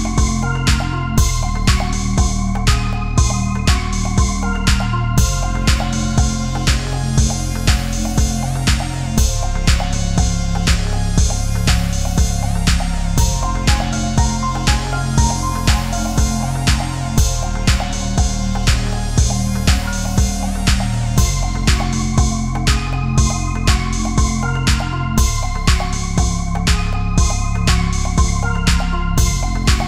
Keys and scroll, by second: 23.8 ctrl+-, 25.3 ctrl+=, 26.2 ctrl+-, 27.3 space.